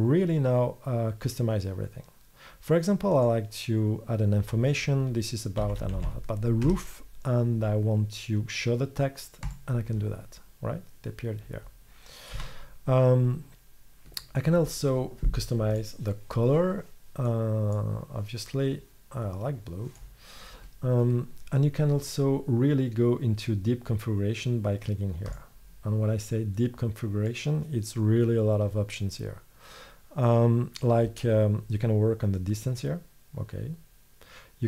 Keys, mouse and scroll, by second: 3.2-4.2 drag, 6.0 o, 10.6-12.4 middle drag, 12.4 z.